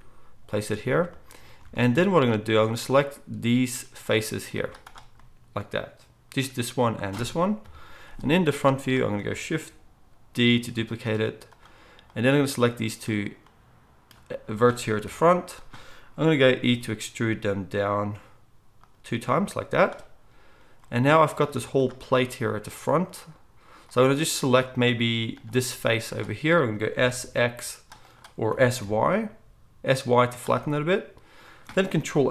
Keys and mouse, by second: 1.6 alt+a, 3.0-19.0 drag, 4.5 z, 7.6 KP_1, 8.5 z, 10.6 shift+d, 15.0 KP_1, 16.6 e, 19.0-32.3 middle drag, 19.0 e, 21.5 z, 26.9 s, 28.5 s.